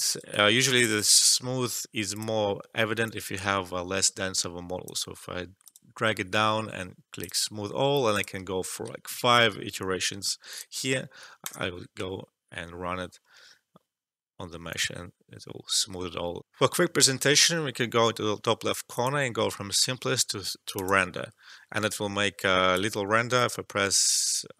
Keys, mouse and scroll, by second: 0.1 alt+right click, 0.4 alt+middle click, 0.6 alt+click, 0.9 alt+right click, 2.1-5.6 drag, 9.1 5, 10.4 click, 14.6 click, 14.6-16.4 alt+drag, 16.4 alt+F12, 18.9 click, 22.0 alt+middle click, 22.4-24.5 alt+drag.